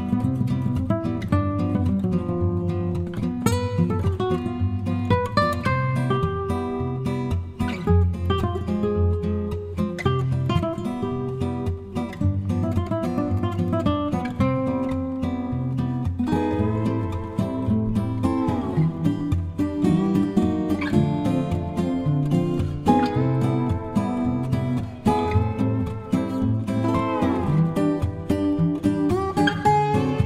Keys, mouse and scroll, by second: 0.3 click, 0.9 click, 2.0-3.6 drag, 4.6 click, 6.9-10.6 shift+drag, 11.2-12.7 shift+drag, 13.6-14.8 shift+drag, 15.1 ctrl+shift+z, 16.3-19.2 ctrl+shift+drag, 20.7-24.4 shift+drag, 24.6-26.1 shift+drag, 27.3 shift+click, 27.6-30.2 shift+drag.